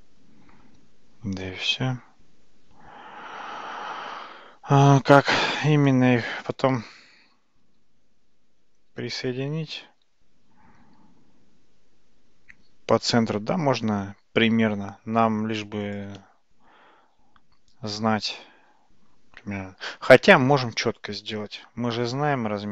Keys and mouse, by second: 7.7 g.